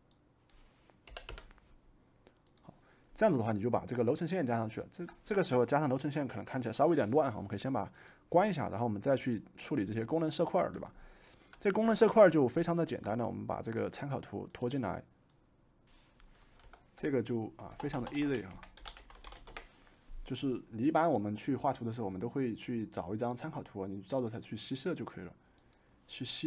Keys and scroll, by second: 1.1 2, 1.3 Return, 4.8 typing, 15.5-16.3 typing, 17.6-19.9 typing, 22.5-23.3 typing.